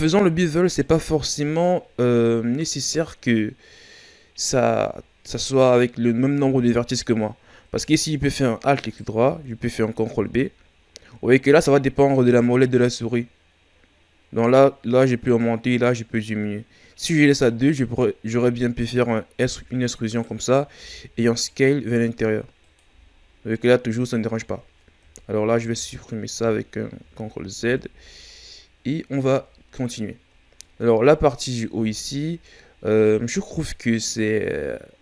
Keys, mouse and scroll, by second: 0.8-2.3 scroll down 5, 2.3-3.6 scroll up 5, 6.4 Tab, 8.8 alt+right click, 10.1 ctrl+b, 19.4 e, 22.8 Tab, 23.1 scroll down 6, 24.3 scroll up 1, 24.9 ctrl+z, 25.4 ctrl+z, 26.9 ctrl+z, 27.6 Tab, 29.9-30.9 shift+scroll up 7, 31.8 Tab, 32.4-32.9 scroll down 2, 32.9 scroll up 2.